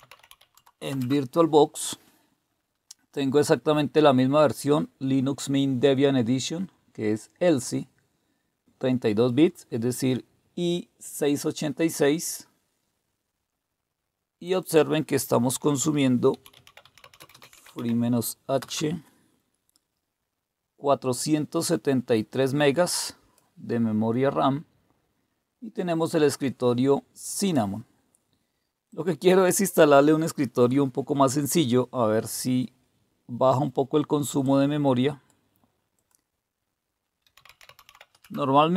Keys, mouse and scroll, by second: 0.0-0.7 typing, 0.9 Return, 14.4 click, 16.1-18.6 typing, 22.3-23.4 drag, 26.0-27.5 drag, 28.9 click, 34.4 click, 35.9 click, 37.0-38.3 typing.